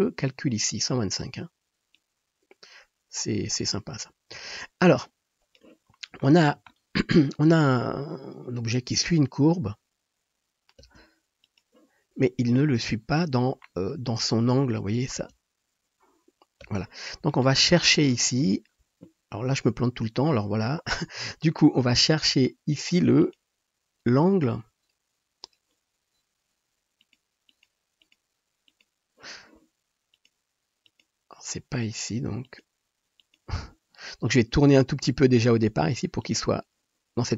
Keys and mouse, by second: 6.2-7.1 shift+middle drag, 7.6 space, 10.6 middle click, 11.0 space, 12.8 KP_7, 15.2 space, 16.8 space, 21.6-23.3 drag, 27.2-27.6 drag, 28.8-30.2 drag, 30.9 middle click, 32.5 middle click, 34.7 r.